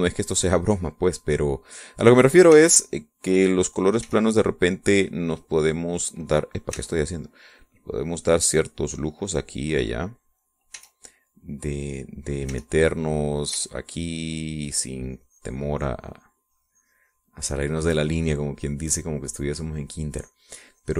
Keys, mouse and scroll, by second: 3.7 e, 4.0-5.1 drag, 5.2 e, 5.5 click, 6.7 click, 7.9 e, 8.0-11.8 drag, 12.0 e, 12.5 click, 13.7 e, 13.8 click, 14.7 e, 15.3-19.1 drag, 19.3-20.9 drag.